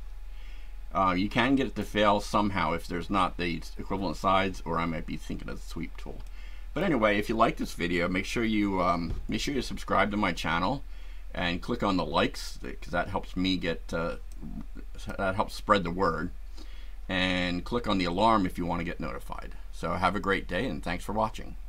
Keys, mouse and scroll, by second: 6.2 shift+middle click, 6.2-7.0 shift+right drag, 14.3 click.